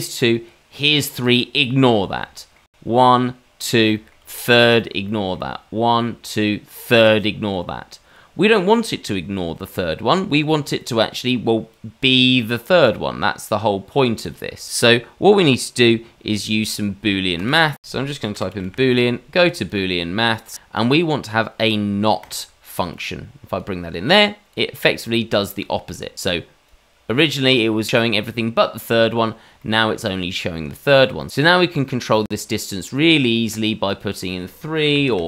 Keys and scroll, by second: 17.8 shift+a, 18.6 o.